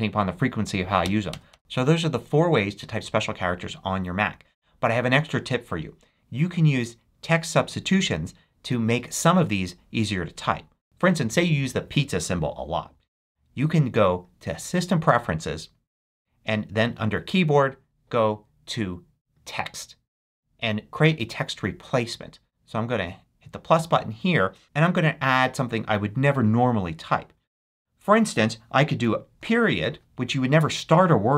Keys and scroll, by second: 1.0 Down, 29.3 •.